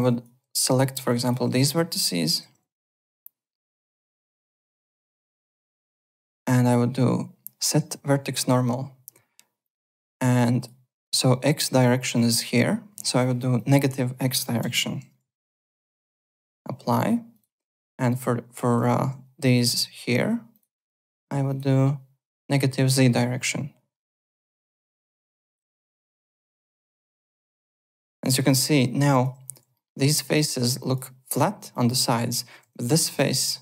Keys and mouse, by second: 0.0 alt+click, 0.4 1, 0.8 click, 1.7 ctrl+shift+click, 4.8 F2, 5.2 alt+right click, 5.4 alt+click, 6.6 click, 9.6 click, 10.3 click, 13.5 click, 13.9 KP_Subtract, 14.6 KP_1, 15.0 BackSpace, 15.2 KP_1, 16.4 click, 17.3 click, 18.3-19.2 typing, 18.8 click, 19.4 ctrl+1, 20.5 click, 21.4 click, 24.7 click, 25.0 KP_0, 25.3 click, 25.5 KP_Subtract, 25.7 KP_1, 26.0 click, 27.1 click, 27.8 `, 27.9 click, 28.2 alt+middle click, 28.4 alt+click, 28.8 F4, 29.1 alt+click, 29.7 alt+middle click, 30.8 alt+click, 31.7 alt+click, 32.0 alt+middle click, 32.2 alt+right click, 32.6 3, 32.7 click, 33.1 z, 33.3 alt+right click.